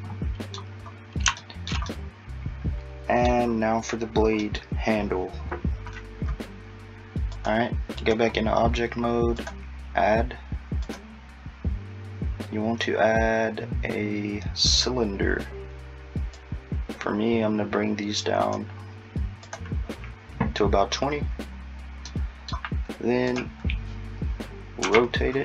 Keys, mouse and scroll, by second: 2.2 middle click, 4.4 middle click, 7.4 click, 9.4 click, 16.4 click, 22.1 middle click, 23.3 click, 24.9 r.